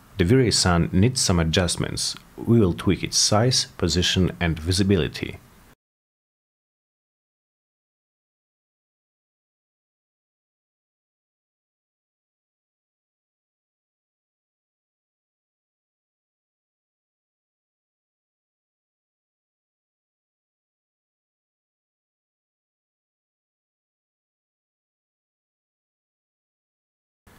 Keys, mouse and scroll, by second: 2.3 click, 3.3 w, 3.9-5.6 drag, 6.1 click, 7.2-7.7 drag, 8.4 click, 9.1 8, 9.3 Return, 10.9 click, 11.4-12.7 typing, 15.2 click, 15.9-18.0 drag, 18.5 click, 19.2-20.6 drag, 21.2-22.4 drag, 23.2 click, 24.4 drag, 26.3 click.